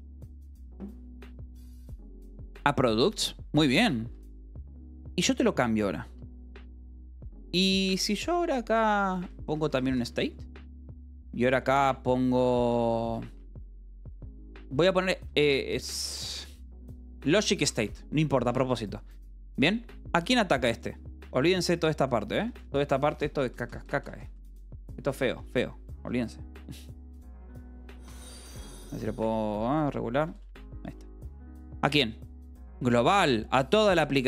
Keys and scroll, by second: 4.0 k, 6.0 a, 6.3 Return, 8.2 ctrl+g, 8.3 Escape, 8.3-10.5 typing, 11.0 Return, 12.8 ctrl+g, 13.3 Escape, 13.4-18.7 typing, 20.3 Escape, 20.5 l, 22.0 v, 22.3 e, 25.3 k, 27.5-28.8 typing, 29.1 Return, 29.4 Escape, 29.9 k, 30.1 d, 30.4 Escape, 30.8 k.